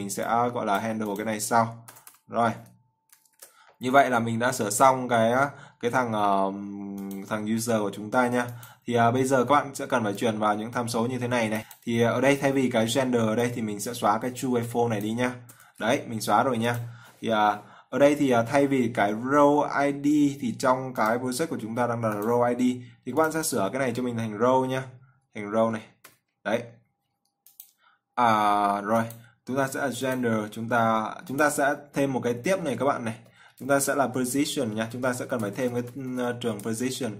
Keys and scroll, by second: 3.5 ctrl+s.